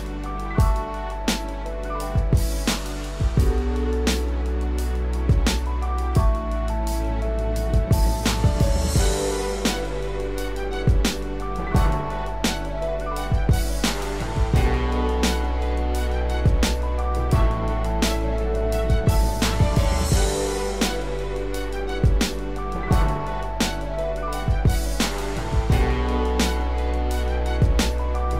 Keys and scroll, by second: 1.7 ctrl+=, 24.6 ctrl+0.